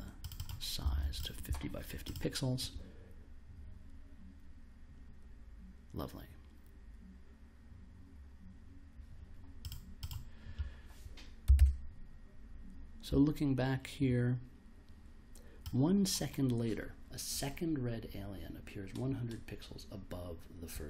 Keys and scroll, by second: 0.0-1.4 typing, 11.5 super+Tab.